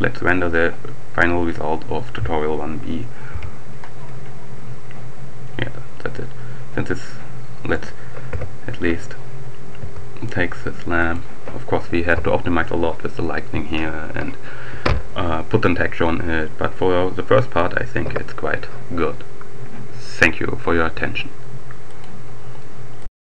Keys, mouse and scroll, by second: 0.8 click, 2.2 F12, 7.6 right click, 8.2 KP_7, 9.5 g, 11.0 click, 11.8 F12, 17.3-18.0 scroll down 2, 18.3-18.8 scroll up 2, 21.7 click, 23.0 click.